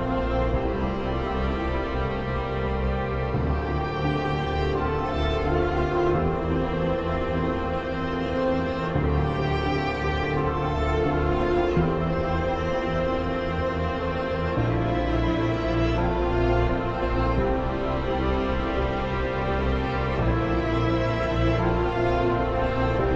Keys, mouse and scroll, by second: 3.4 right click, 4.4 click, 6.2 Escape, 6.6 F4, 7.1 F2, 7.5-8.9 drag, 12.9 ctrl+z, 15.0 click, 21.0 Tab.